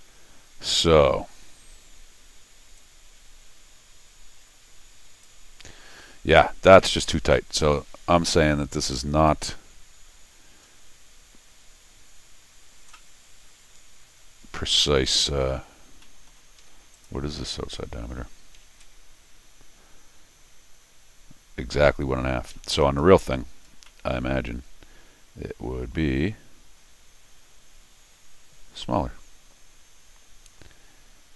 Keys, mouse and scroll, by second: 0.1 middle click, 2.8-5.2 drag, 7.3-7.8 scroll down 2, 8.6 middle click, 8.6-8.9 scroll up 4, 8.9 middle click, 10.1 middle click, 10.6 middle click, 14.0-14.7 scroll down 2, 16.0 middle click, 16.6 Escape, 16.9 click, 18.7 alt+m, 22.5 Escape, 23.7 scroll down 2, 23.8-31.3 middle drag.